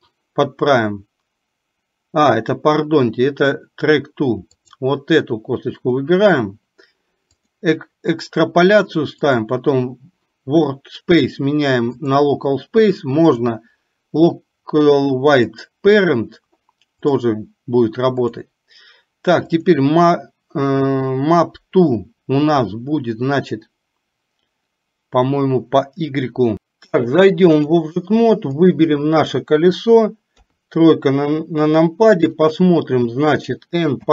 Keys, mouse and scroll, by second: 4.7 click, 9.4-12.1 drag, 13.4-15.6 drag, 17.2-18.5 drag, 27.1 click, 28.7 click, 30.4 KP_3, 32.4 click.